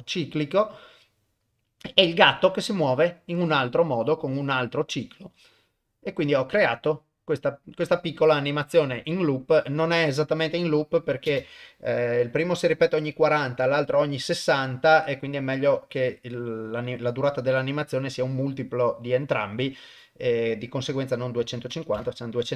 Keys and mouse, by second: 11.3 shift+space, 21.0 click.